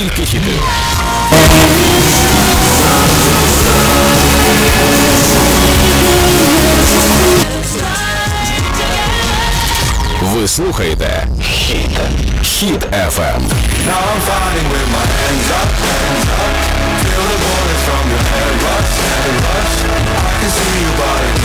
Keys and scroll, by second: 7.9 Page_Down.